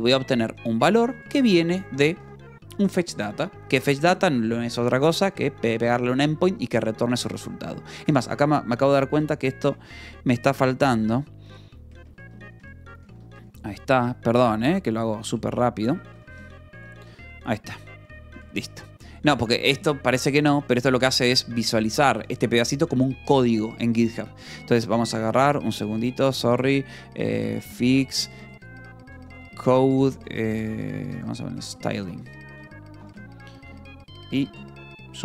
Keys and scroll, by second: 0.2 v, 0.7 Escape, 0.9 l, 2.0 v, 2.6 e, 3.6 Escape, 7.7 k, 8.6 a, 9.0 Return, 10.5 Escape, 10.8-19.8 typing, 12.5 Escape, 21.9 k, 23.2 Escape, 24.0-31.5 typing, 32.0 Return, 33.5 shift+p, 34.2 shift+p, 35.0 shift+p.